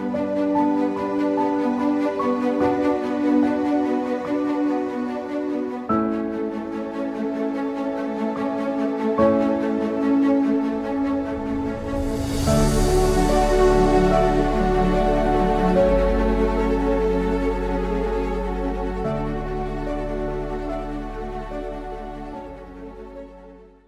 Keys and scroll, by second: 5.7 typing.